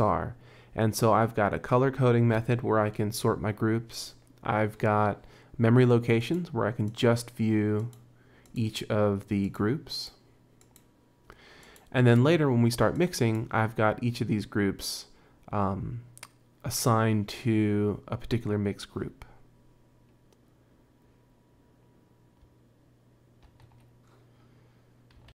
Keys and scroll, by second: 23.5 super+Tab.